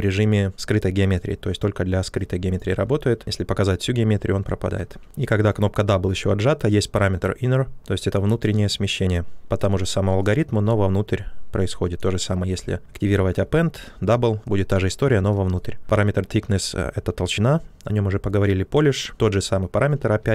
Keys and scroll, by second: 4.8 ctrl+z, 13.0 ctrl+z, 20.2-20.3 typing.